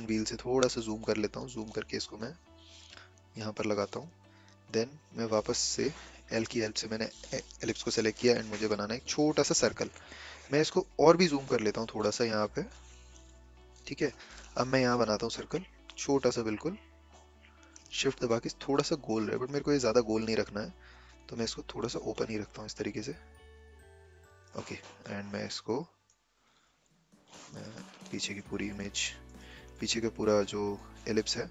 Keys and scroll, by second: 6.0 l, 27.9 ctrl+z.